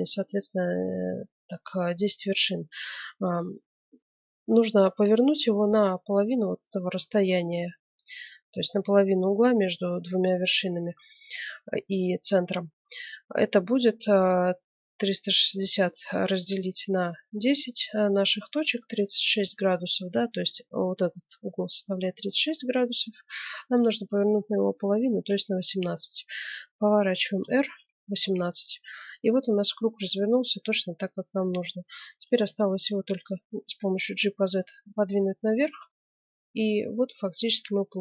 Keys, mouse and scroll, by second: 27.2 r, 32.1 g.